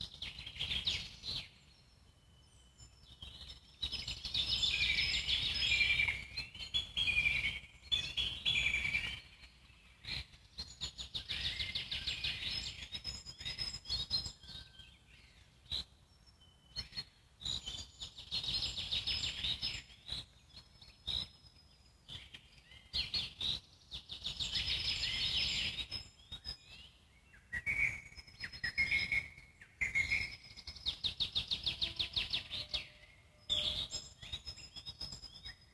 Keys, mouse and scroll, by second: 0.4-1.6 ctrl+z, 1.8 ctrl+z, 2.5-3.5 shift+drag, 3.5 ctrl+z, 4.0 ctrl+z, 4.4 ctrl+z, 4.7 ctrl+z, 5.0 ctrl+z, 5.1 ctrl+z, 5.3 ctrl+z, 5.4 ctrl+z, 5.5-6.7 middle drag, 6.7 ctrl+z, 6.8-7.6 ctrl+z, 8.2-9.9 alt+middle drag, 9.9 f, 10.7-13.3 ctrl+drag, 13.3 shift+f, 14.4-17.5 ctrl+drag, 17.5 alt+middle click, 18.1 ctrl+click, 18.7 ctrl+z, 19.8 shift+f, 21.6-25.3 ctrl+drag, 25.3 alt+middle click, 26.0-27.3 shift+drag, 27.3-28.6 alt+middle drag, 28.6 shift+f, 30.0-33.0 ctrl+drag, 33.0-34.1 alt+middle drag, 34.1 ctrl+click, 34.9 alt+middle click, 35.3-35.7 shift+drag.